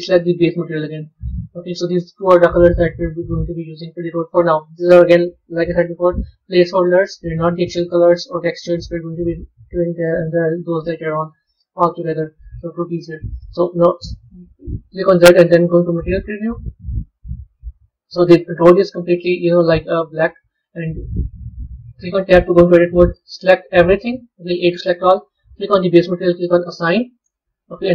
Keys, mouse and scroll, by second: 4.7-6.5 drag, 7.5 click, 8.2-10.3 scroll down 2, 10.3-11.5 drag, 11.5-13.4 scroll up 16, 14.3 z, 17.2-17.8 scroll up 3, 17.8-18.4 scroll down 1, 18.6-20.2 middle drag, 20.2-21.7 scroll down 1, 21.7 b, 25.5 click, 26.5 click.